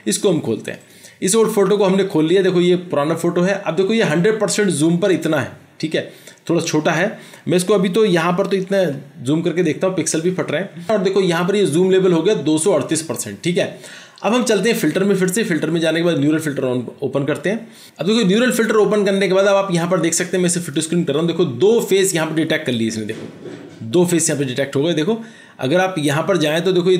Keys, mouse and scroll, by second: 0.9 double click, 8.6 ctrl+0.